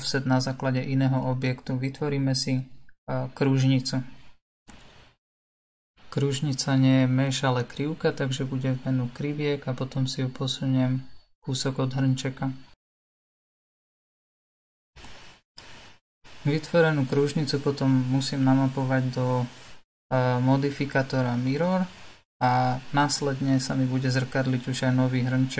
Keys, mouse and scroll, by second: 0.9 click, 1.4-2.7 drag, 6.4-9.5 drag, 16.1-16.8 scroll down 1, 16.8-20.5 middle drag, 20.5 click, 22.6-25.5 drag.